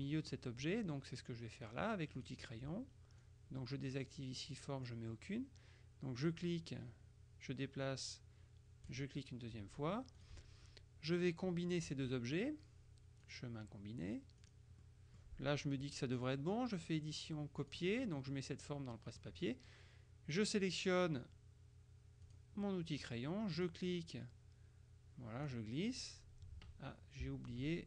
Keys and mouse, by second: 0.2 click, 2.3 click, 3.4-5.5 drag, 6.3 click, 9.0 click, 10.3 click, 11.2-12.4 drag, 13.4 click, 14.5 click, 14.9 right click, 16.3 click, 17.7 click, 19.0 click, 22.4 click, 23.6 click, 25.6 click, 27.3 ctrl+z.